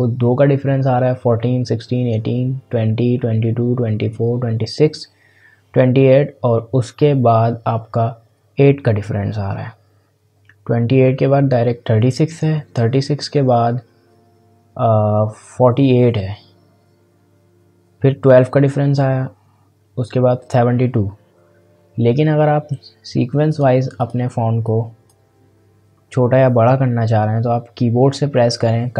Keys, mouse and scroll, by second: 23.4-27.4 drag.